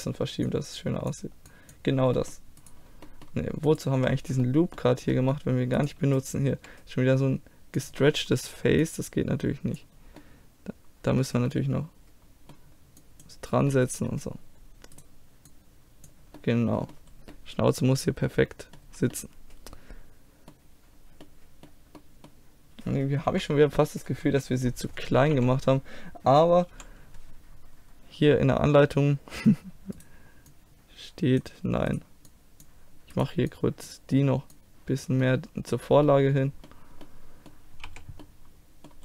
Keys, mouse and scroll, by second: 1.7-4.4 middle drag, 2.6-4.4 right drag, 4.6-5.7 middle drag, 5.8 middle click, 6.6 g, 7.2 click, 8.8 click, 9.8 middle click, 9.9 click, 10.0 middle click, 10.7 click, 10.8-13.0 middle drag, 13.0-15.0 drag, 15.0 middle click, 15.5 click, 15.5 right click, 16.4 middle click, 18.1-20.5 middle drag, 23.3 KP_3, 24.3 KP_1, 25.4 z, 26.7 KP_5, 27.6 middle click, 30.0 right click, 31.7 click, 35.0 click, 35.2-36.5 middle drag, 37.9 z, 38.9-39.0 middle drag.